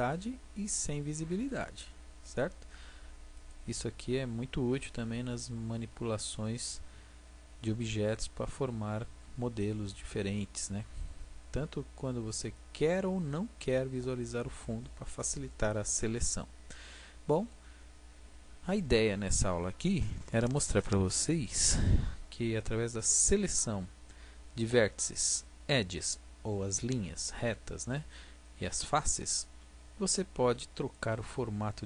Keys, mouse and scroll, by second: 5.0 a, 6.2 a, 7.2 middle click, 15.0-16.7 middle drag, 18.8-22.2 middle drag, 28.4-31.2 middle drag, 31.7-31.8 middle drag.